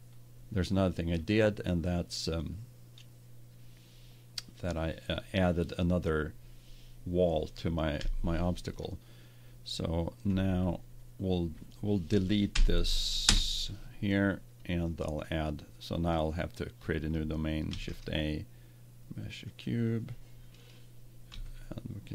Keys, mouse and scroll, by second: 7.9 KP_1, 10.2 Tab, 12.4 Delete, 17.6 shift+a, 21.2 z.